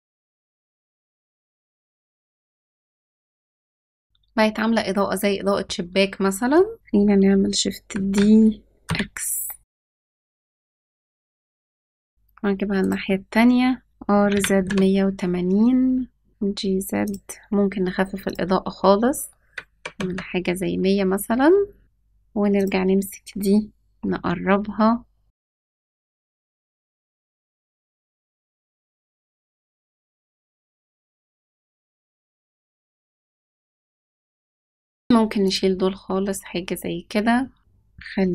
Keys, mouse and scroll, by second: 6.7 ctrl+s, 7.8 shift+d, 14.0 r, 16.3 g, 18.1-20.0 drag, 19.8 KP_0, 22.5 click, 23.8 g, 27.2 r, 27.7 g, 28.2 g, 30.2 ctrl+s, 31.0 r, 32.6 ctrl+s, 34.7 click, 35.4 click, 37.6 click, 37.6-37.9 scroll down 2.